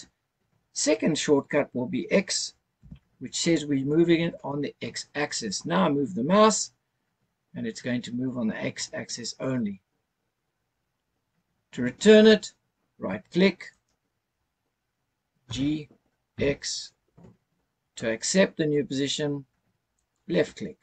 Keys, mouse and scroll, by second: 2.8 x, 5.6 x, 13.7 right click, 15.4 g, 16.3 x, 19.9 click.